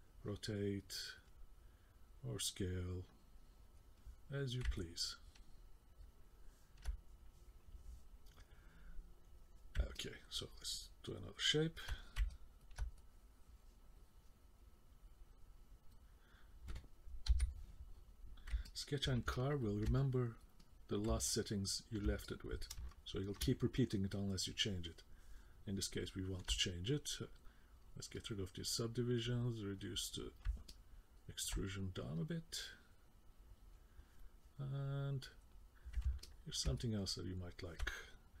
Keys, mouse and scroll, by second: 2.0 click, 4.8 middle click, 10.0 middle click, 10.7 middle click, 12.3 middle click, 13.0 click, 17.3 k, 18.7 middle click, 19.3 ctrl+middle click, 20.0 middle click, 20.6 middle click, 21.3 ctrl+middle click, 22.2 middle click, 22.9 shift+middle click, 23.6 middle click, 28.1 click, 29.8 click, 30.7 middle click, 32.2 click, 36.2 ctrl+middle click, 36.8 middle click.